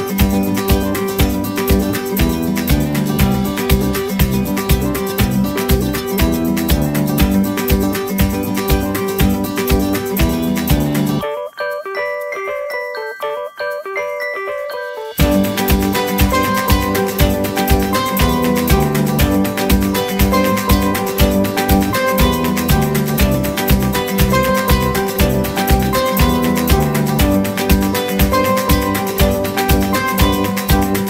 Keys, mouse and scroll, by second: 3.2 scroll down 1, 5.9 ctrl+z, 7.9 shift+middle click, 8.7-9.1 shift+scroll up 2, 14.8 middle click, 16.6 space, 17.5 double click, 18.4 right click, 21.4-23.9 typing.